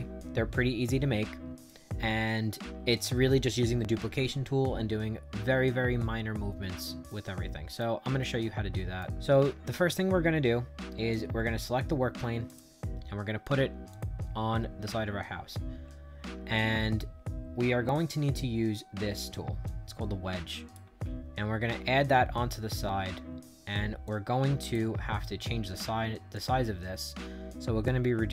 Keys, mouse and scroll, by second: 7.0 right click, 8.1 right click, 12.4 click, 13.8 click, 15.8 middle click, 16.2 middle click, 16.3 scroll down 2, 19.6-20.6 drag, 21.0-21.6 scroll down 2, 21.6-23.2 scroll up 2, 23.2-23.8 scroll down 4, 24.0 click, 24.9 scroll down 2, 26.2-28.3 drag.